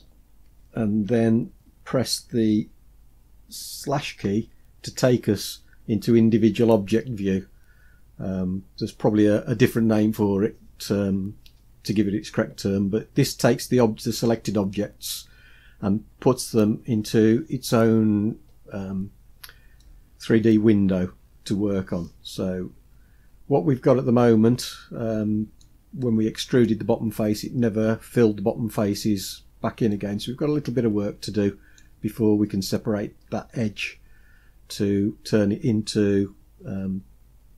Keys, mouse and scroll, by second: 18.8-19.8 scroll down 2, 19.8-25.6 middle drag, 19.8 scroll down 1, 26.1 middle click, 29.9-31.8 middle drag.